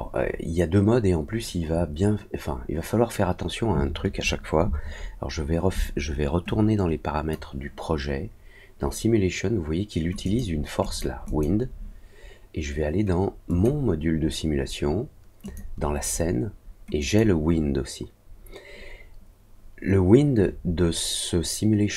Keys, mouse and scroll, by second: 6.4 click, 10.2 click, 10.8 click, 11.2 click, 13.4 click, 15.4 click, 16.9 click.